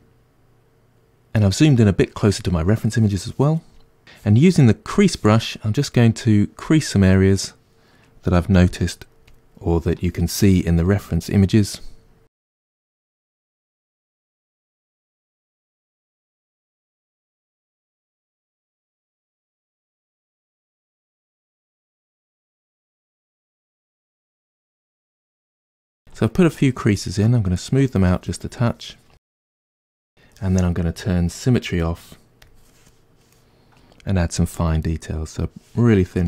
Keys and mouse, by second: 8.7 f, 10.0-18.2 ctrl+drag, 18.2 middle click, 18.4-20.0 drag, 20.0 middle click, 20.4 shift+click, 20.8-23.0 middle drag, 22.5 f, 23.0-24.5 drag, 24.5 ctrl+middle click, 25.4-27.3 shift+drag, 27.3 middle click, 27.8-29.8 shift+drag, 29.8-32.5 middle drag, 32.5 click, 33.0-36.2 middle drag, 34.5 f.